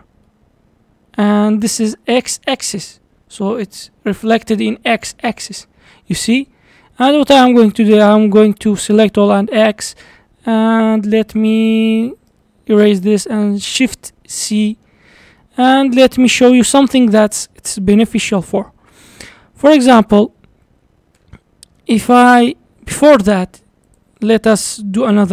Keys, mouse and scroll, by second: 0.3-3.3 middle drag, 3.3 scroll down 3, 3.6-5.2 middle drag, 5.2 scroll down 3, 5.5-7.2 middle drag, 7.2 a, 9.0 x, 10.0-11.3 middle drag, 11.3 d, 11.4-12.6 right drag, 12.6-13.1 scroll up 3, 13.8 shift+c, 14.5-16.0 middle drag, 16.0-16.4 scroll up 4, 16.4-20.1 shift+middle drag, 21.2 shift+a.